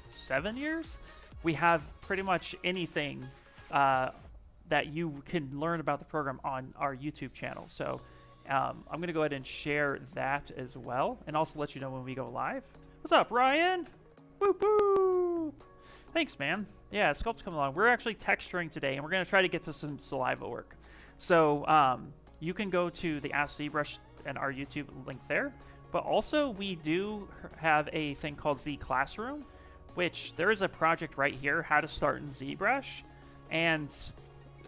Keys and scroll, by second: 12.9 ctrl+v, 13.6 Return, 25.4-26.6 typing, 27.9 Return.